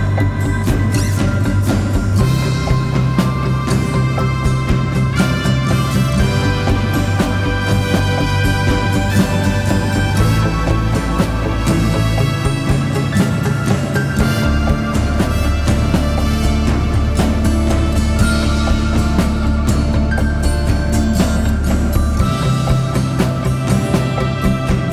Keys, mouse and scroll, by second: 1.1 Right, 1.2 Right, 2.0 alt+shift+click, 4.4 Down, 4.5 Down, 4.6 Down, 4.7 Down, 4.8 Down, 4.9 Down, 5.5 Up, 5.6 Up, 15.8 shift+click, 17.7 shift+click.